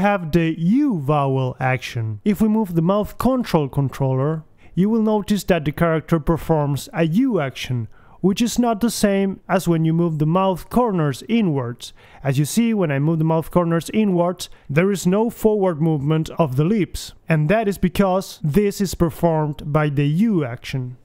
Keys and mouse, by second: 1.1-5.5 middle drag, 5.5 g, 10.3-11.3 right drag, 11.0 alt+g, 11.7 right click, 11.8 g, 12.8 right click, 13.0 g, 13.6-14.9 right drag, 14.4 g, 15.9 alt+g, 15.9 right click, 16.3 alt+g, 17.4 click, 19.7 click.